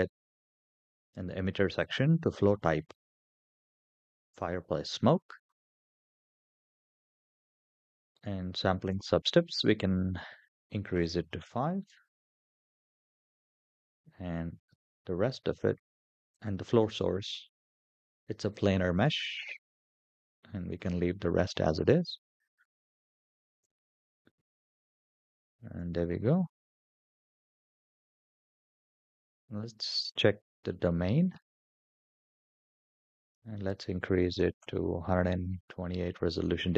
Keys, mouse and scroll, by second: 0.3 click, 1.6-4.2 drag, 10.1 click, 16.1 click, 18.3-21.2 drag, 23.6 /, 25.2-25.5 shift+middle drag, 25.8 middle click, 26.1-26.4 scroll down 4, 26.6-27.0 shift+middle drag, 27.3-28.4 middle drag, 29.7 click, 33.0-35.2 drag, 36.0-36.7 scroll down 1.